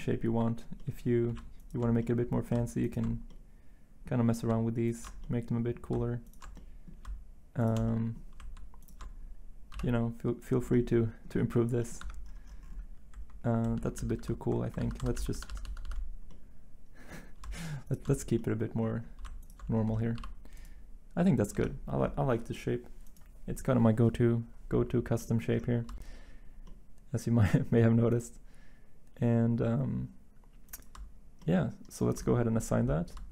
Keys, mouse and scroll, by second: 9.7 x, 12.0 Tab, 13.7 ctrl+z, 13.9 ctrl+z, 14.1 ctrl+z, 20.2 x, 21.5 Tab.